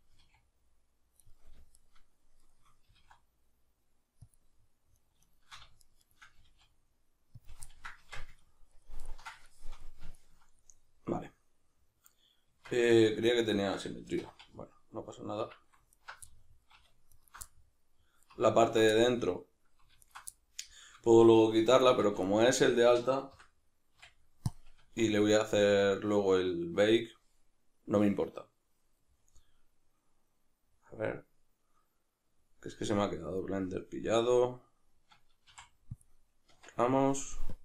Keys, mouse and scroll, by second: 0.1 g, 1.7 shift+right drag, 2.4 shift+right drag, 2.9 g, 4.3 click, 4.9 right click, 5.3 shift+right drag, 5.8 shift+right click, 6.0 shift+right click, 6.4 g, 7.4 click, 7.6-15.9 ctrl+middle drag, 8.0 Tab, 12.5 Tab, 14.2 2, 14.5 alt+x, 15.4 Escape, 15.9 alt+right click, 16.3-17.1 middle drag, 17.1 alt+shift+right click, 17.5-18.7 middle drag, 18.7 alt+shift+right drag, 19.1-20.1 middle drag, 20.1 alt+shift+right click, 20.3-22.4 middle drag, 22.1 v, 22.8-37.5 right drag, 23.3 l, 23.9 x, 35.5 x, 36.5 Tab, 37.5-37.6 drag.